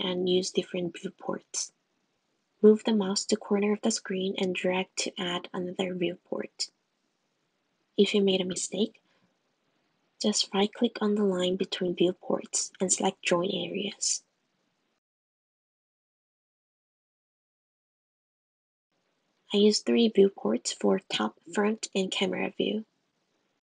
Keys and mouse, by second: 2.0-8.1 drag, 12.9-16.9 drag, 18.7 click, 21.6 Tab, 22.0 `, 23.4 click.